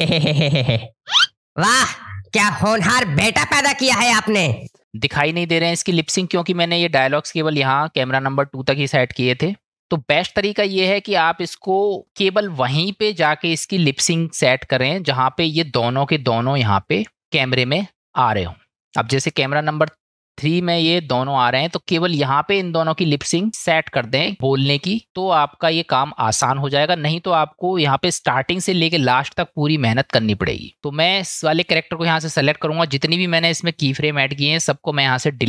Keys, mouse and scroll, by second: 4.6 space, 16.7-19.0 drag, 19.8-20.7 drag, 33.1-34.7 drag.